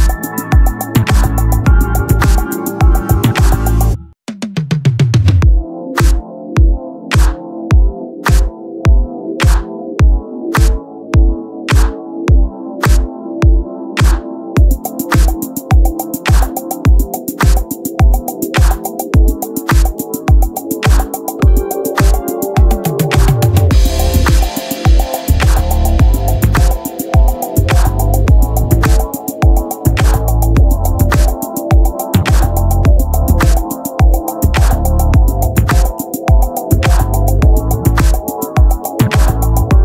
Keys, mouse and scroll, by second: 0.4 z, 2.5 z, 3.0 ctrl+l, 4.6-6.1 drag, 8.6 right click, 10.7-11.7 middle drag, 11.7-13.2 right drag, 13.2 z, 14.0-15.6 drag, 15.6 s, 16.9 r, 18.1-22.0 drag, 28.0-30.3 right drag, 28.7 ctrl+l, 36.7 s.